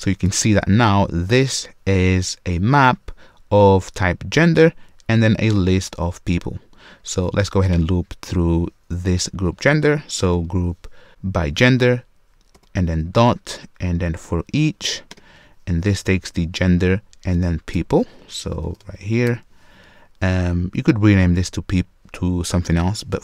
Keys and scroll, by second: 11.1 Return, 14.7 Return.